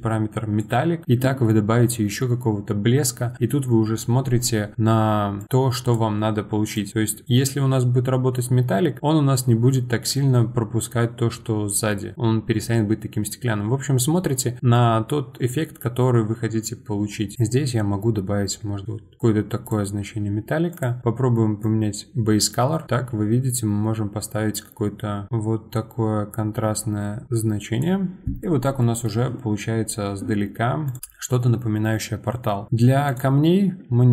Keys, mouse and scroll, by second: 5.4-10.9 drag, 20.7 click, 28.4 middle click, 28.7-29.8 scroll down 4, 28.8 middle drag, 30.8 click, 30.8 scroll down 2, 32.4 scroll up 1, 32.7-33.0 middle drag, 33.0 click.